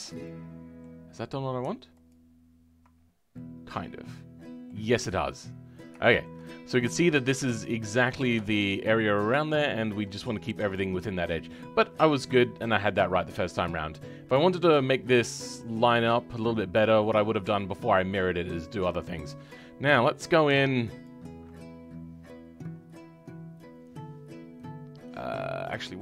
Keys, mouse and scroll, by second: 0.2 middle click, 1.0-1.4 scroll up 2, 2.0 alt+click, 2.9-3.3 scroll down 2, 3.3-18.5 middle drag, 18.5-18.8 scroll down 6, 18.8 middle click, 19.3-21.0 scroll up 2, 21.0 alt+click, 21.6-25.5 scroll down 2, 25.5-25.9 scroll up 2, 25.9-26.0 middle drag.